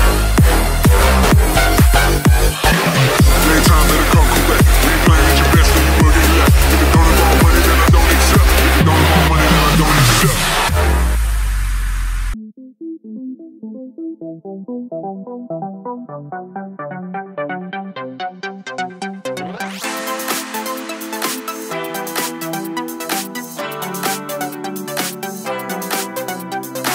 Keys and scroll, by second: 1.8 1, 24.6 space, 25.1 space, 25.6 space.